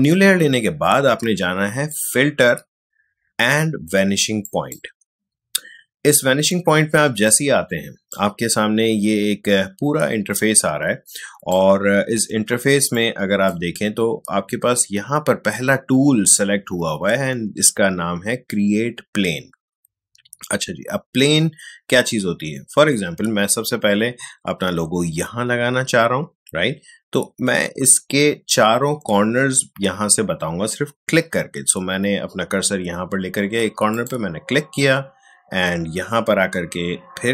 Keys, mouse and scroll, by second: 1.9 click, 4.4 click, 8.1-12.6 drag, 12.6 space, 33.9 click.